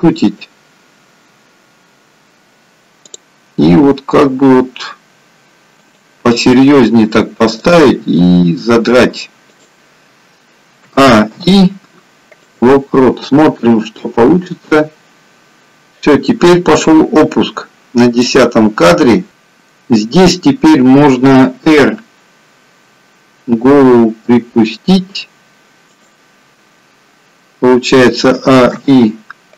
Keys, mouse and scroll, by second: 3.1 click, 4.0 r, 7.6 click, 8.2 r, 10.9 a, 11.4 i, 14.6 click, 19.3 click, 21.8 r, 28.4 a, 28.9 i.